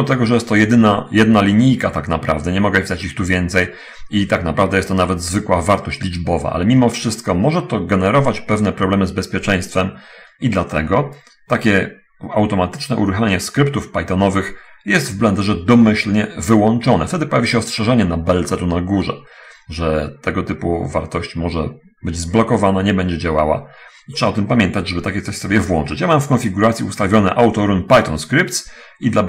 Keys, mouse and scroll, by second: 25.2 alt+middle click.